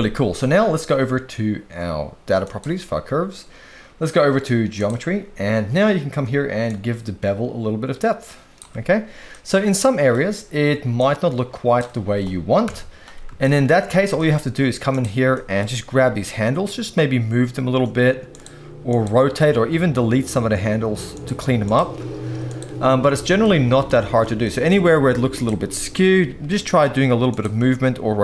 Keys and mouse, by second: 2.4 click, 4.8 click, 6.6-8.6 shift+drag, 9.3 middle click, 11.0 shift+click, 12.6 KP_1, 13.4 shift+middle click, 14.2 shift+middle click, 14.9 click, 15.3 shift+middle click, 15.9 g, 18.3 click, 18.9 click, 19.2 g, 21.6 click, 21.9 g, 23.4 shift+middle click, 24.4 shift+middle click, 25.3 click, 25.6 shift+middle click, 26.4 g, 27.6 r.